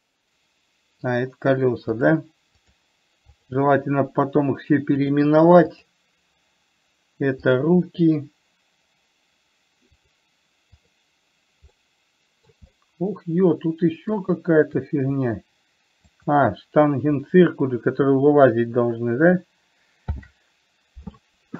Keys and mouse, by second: 2.4 drag, 2.9 click, 3.7 click, 5.3 click, 6.0 click, 10.4 click, 11.0 click, 12.0-12.9 middle drag, 13.0-14.4 middle drag, 16.4 shift+click, 20.4 ctrl+j.